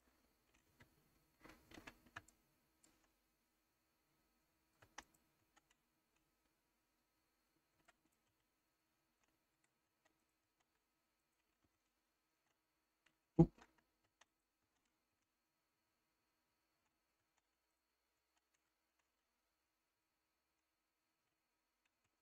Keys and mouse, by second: 0.8 shift+s, 2.3 shift+middle click, 4.9 Tab, 5.4 Tab, 7.8 b, 8.4 shift+s, 9.9 Tab, 10.2 click, 10.5 Tab, 11.3 click, 11.8 shift+s, 13.4 ctrl+z, 14.1 Tab, 14.7 Tab, 15.3 shift+s, 17.2 Tab, 17.8 click, 18.2 Tab, 19.2 shift+s, 22.1 ctrl+z.